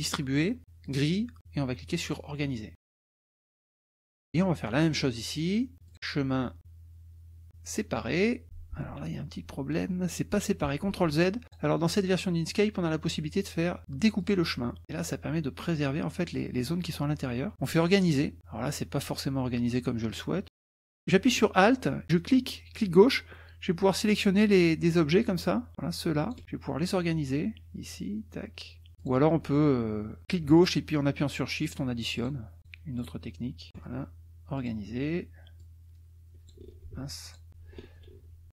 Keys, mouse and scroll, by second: 0.8 click, 2.0 click, 2.7-4.1 drag, 4.3 click, 5.9 click, 7.7 click, 11.0 ctrl+z, 11.5 drag, 12.5 click, 14.3 drag, 17.7 click, 18.6 click, 22.2-26.4 alt+drag, 26.8 click, 27.9-28.9 drag, 29.1 click, 30.5 ctrl+shift+click, 31.6 shift+click, 32.1 shift+click, 32.6 shift+click, 33.0 shift+click, 33.7 shift+click, 34.6 click, 35.6-36.6 drag, 37.2 ctrl+click, 37.9 ctrl+z.